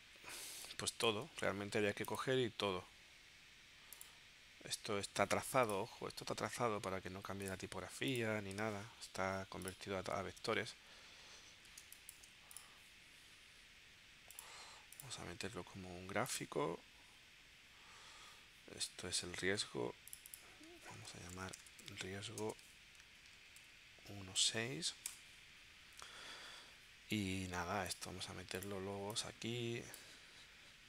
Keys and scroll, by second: 0.5 space, 8.9 super+y, 10.3 super+y, 11.9 space, 20.9-24.4 typing, 25.1 Return.